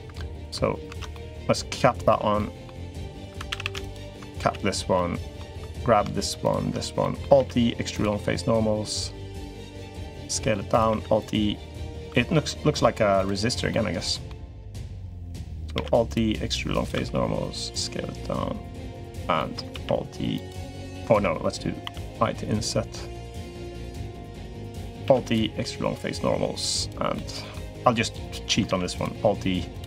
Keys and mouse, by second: 0.7 ctrl+z, 0.9 middle click, 1.9 f, 2.1 middle click, 3.0 2, 3.3 a, 3.4 a, 3.7 alt+shift+click, 4.2 f, 4.7 middle click, 4.8 click, 4.9 middle click, 5.4 3, 5.5 middle click, 6.2 shift+click, 6.8 click, 7.2 alt+e, 9.6 s, 10.7 alt+e, 11.8 s, 13.5 middle click, 14.6 middle click, 15.5 alt+e, 16.7 s, 19.1 click, 19.5 alt+e, 20.9 ctrl+z, 21.6 i, 24.8 alt+e, 26.9 click, 28.4 alt+e.